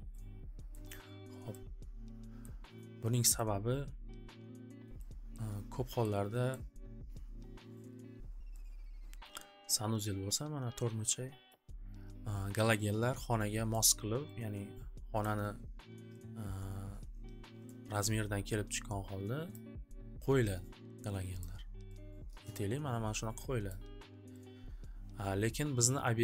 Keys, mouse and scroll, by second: 0.7 scroll, 2.2-2.6 scroll, 3.3 click, 5.3 scroll, 6.5 scroll, 11.3 scroll, 11.5 click, 13.8 click, 15.2 click, 17.6 click, 19.5 click, 21.4 click, 22.5 click, 23.6 click, 25.5 click.